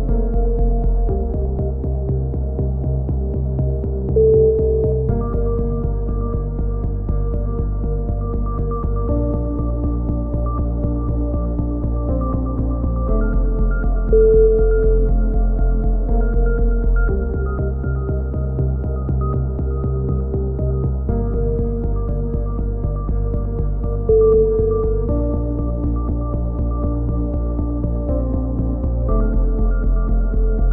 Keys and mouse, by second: 0.8 ctrl+z, 1.3 ctrl+z, 1.5 ctrl+z, 2.0 ctrl+z, 2.3 ctrl+z, 3.0 ctrl+z, 3.2 ctrl+z, 3.4 ctrl+z, 4.4-4.8 middle drag, 4.8-5.9 drag, 5.9 a, 6.2 c, 7.2 right click, 7.4-7.9 middle drag, 7.9-8.8 drag, 8.8 a, 9.2 c, 10.3 click, 11.0-12.1 drag, 12.1 a, 12.3 c, 13.1-15.0 drag, 15.0 a, 15.4 z, 15.7-16.2 drag, 20.0 KP_1, 20.3 z, 20.7 z, 23.2 z, 23.5 z, 23.7 z, 23.9 b, 27.0-28.6 drag, 29.3 middle drag, 29.5-30.7 drag, 29.9 g.